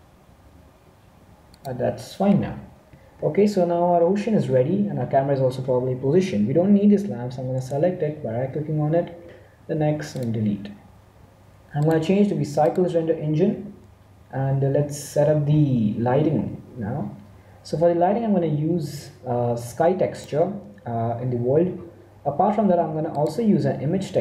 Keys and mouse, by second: 6.5 click, 7.5-9.3 right drag, 9.7 x, 11.7-13.5 drag, 20.0-21.6 drag.